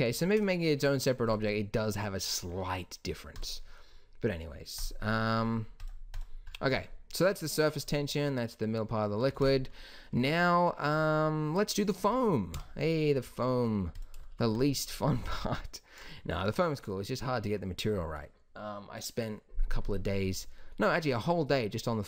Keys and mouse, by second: 0.0 Escape, 6.4-8.7 middle drag, 9.3 ctrl+s, 12.4 KP_1, 13.9-16.0 drag.